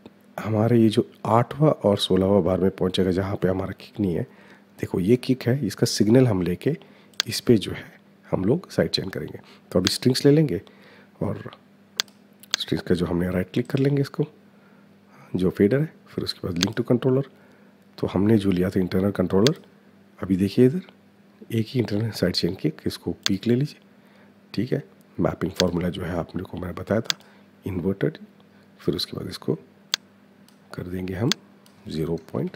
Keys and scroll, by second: 31.9 KP_0, 32.2 KP_Decimal, 32.4 KP_5.